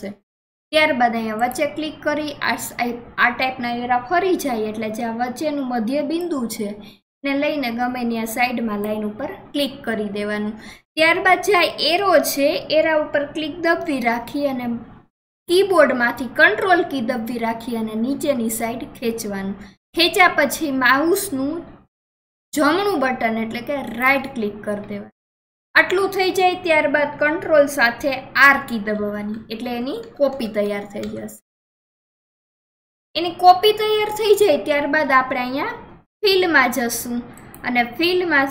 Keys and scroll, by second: 28.5 ctrl+r.